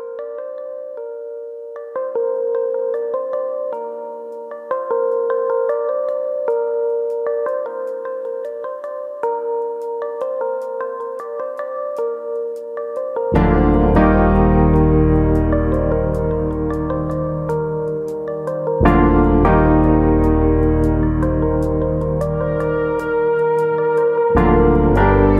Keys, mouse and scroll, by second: 0.3 middle click, 1.2 middle click, 1.2-1.9 scroll up 1, 2.2 click, 2.6 middle click, 4.4 click, 5.0 shift+click, 5.4 middle click, 6.3 ctrl+KP_Add, 8.1 scroll down 1, 8.4 middle click, 9.8 middle click, 13.5 ctrl+e, 15.2 middle click, 15.6 scroll up 4, 15.9 middle click, 16.2 scroll down 1, 16.4 ctrl+z, 16.7 shift+middle click, 17.0 scroll up 1, 17.2 middle click, 19.9 click, 20.7 shift+click, 21.9 x, 23.9 middle click.